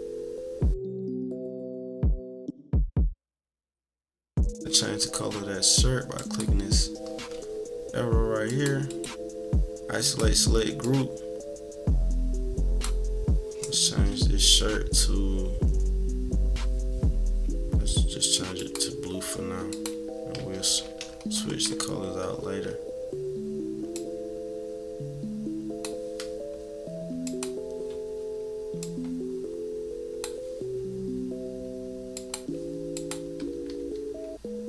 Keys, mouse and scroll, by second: 0.7 Delete, 1.0 Delete, 1.1 click, 1.3 Delete, 1.4 scroll up 2, 1.6 click, 1.7 Delete, 1.8 click, 1.9 Delete, 2.1 click, 2.1 Delete, 2.2 click, 2.3 Delete, 2.5 -, 2.6 scroll down 2, 2.7 scroll up 2, 2.7 =, 3.0 click, 3.2 Delete, 3.3 scroll up 2, 3.4 click, 3.6 Delete, 3.7 middle click, 3.9 -, 4.0 middle click, 4.2 =, 4.3 -, 4.4 middle click, 6.1 click, 8.4 click, 8.8 click, 10.0 click, 10.8-12.8 drag, 18.6-19.8 drag, 20.3 =, 20.6-21.8 scroll down 8, 20.6 =, 20.8 =, 22.6 scroll up 2, 23.9-25.8 drag, 27.2 click, 27.8 scroll up 1, 28.8-30.2 drag, 32.1 click, 32.9 click, 33.5 -, 34.1 scroll up 2.